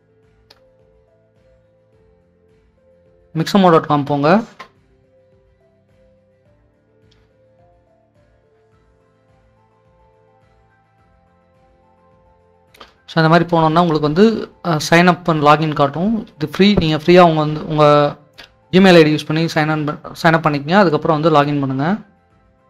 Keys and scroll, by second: 0.4-2.5 typing.